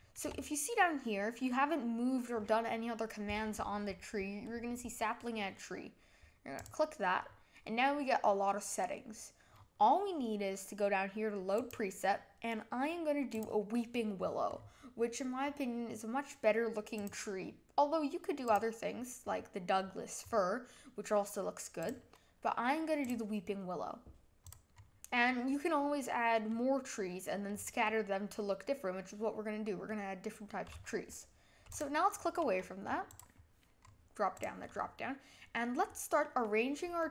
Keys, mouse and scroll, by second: 6.5-9.7 drag, 11.5-14.1 drag, 14.1-15.4 scroll down 9, 15.4-16.9 scroll down 1, 16.9-19.3 drag, 19.3-20.2 scroll down 5, 20.2-21.8 scroll up 3, 21.8-24.5 drag, 24.7-26.5 scroll up 1, 26.5-27.5 middle drag, 27.5-27.8 scroll down 5, 27.8-30.9 middle drag, 31.7 click, 33.1 click, 33.8-34.3 scroll up 1, 34.3 click, 34.7-36.7 middle drag, 36.7-37.1 scroll down 2.